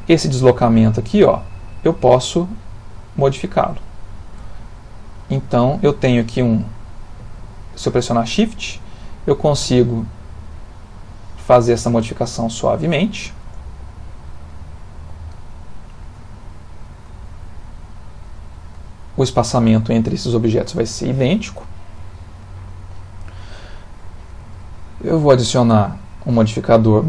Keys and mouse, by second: 0.2 ctrl+middle click, 0.2 click.